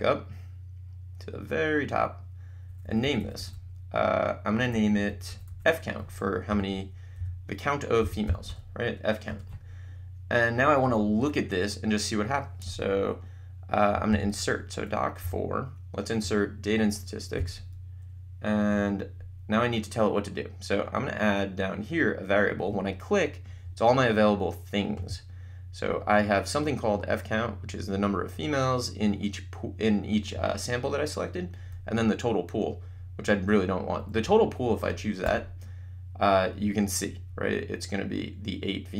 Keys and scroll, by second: 6.5-8.9 typing, 9.2 Return, 15.4 4, 17.4 7, 34.3 Down, 35.3 Return.